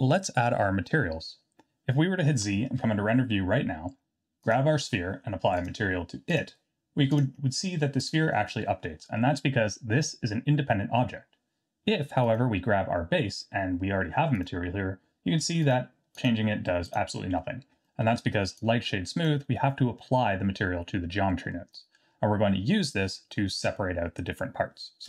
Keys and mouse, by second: 2.6 z, 7.1 drag, 12.3 click, 17.9 middle click, 18.7-19.3 drag, 21.6 middle click, 23.2 middle click.